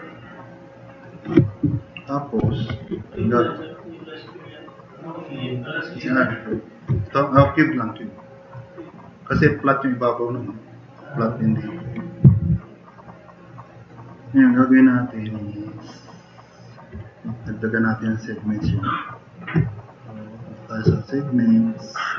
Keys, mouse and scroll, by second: 3.0-6.8 drag, 7.5 drag, 12.9-13.9 drag, 14.2-15.3 drag, 16.0-16.6 drag.